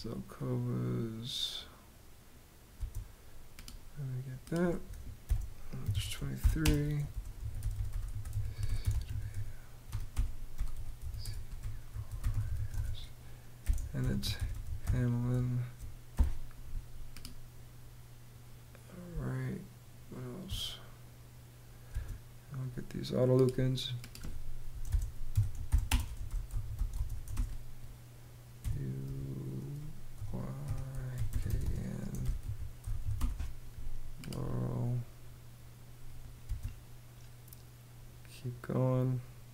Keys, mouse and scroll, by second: 2.3 space, 4.8-15.7 typing, 18.6 space, 21.4 space, 24.2-26.9 typing, 28.2 u, 29.7-33.2 typing, 36.0 space.